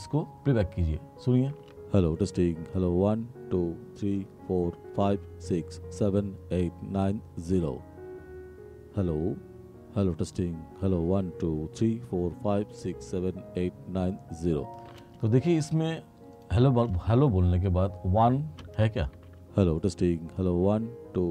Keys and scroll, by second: 1.6 space, 14.9 space, 19.2 space.